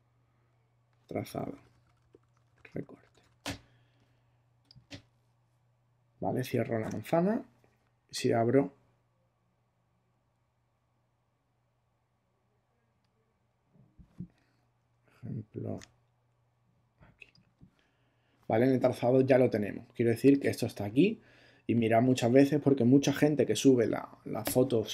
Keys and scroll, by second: 1.0-3.7 typing, 6.8 super+w, 15.8 e.